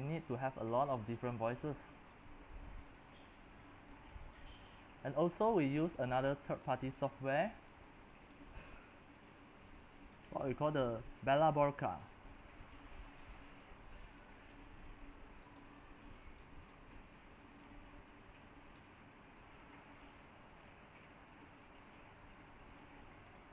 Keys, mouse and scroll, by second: 1.5-2.0 scroll down 4, 2.0-2.8 scroll up 6, 2.8-3.4 scroll down 3, 3.4-15.8 drag, 15.8-16.8 middle drag, 15.8-16.8 scroll down 1, 16.8-23.5 drag.